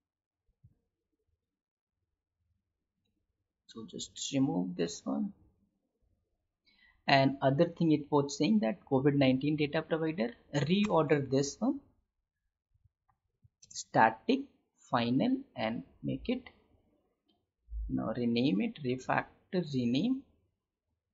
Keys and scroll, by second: 0.5 ctrl+alt+l, 4.7 ctrl+y, 13.7 space.